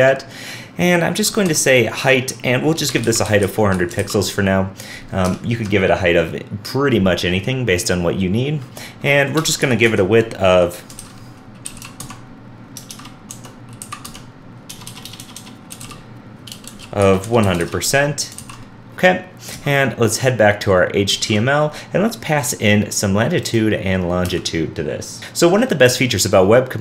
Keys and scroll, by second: 4.0 super+s, 11.0 super+z, 12.9 super+z, 12.9 super+BackSpace, 18.4 super+s, 21.0 super+s, 21.1 alt+super+Left.